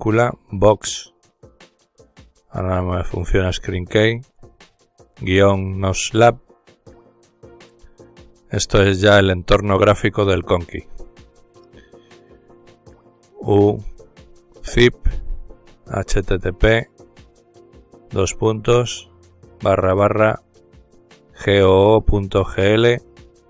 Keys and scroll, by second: 18.3 typing, 20.2-22.6 typing.